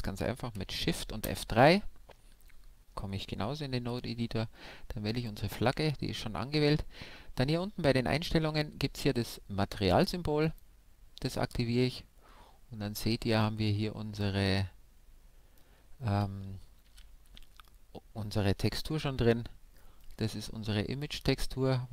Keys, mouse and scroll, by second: 1.3 shift+F3, 3.8 n, 5.1-7.0 drag, 10.5-12.2 drag, 11.9-14.5 middle drag, 14.5-16.9 drag, 18.1-19.4 middle drag, 20.0 click.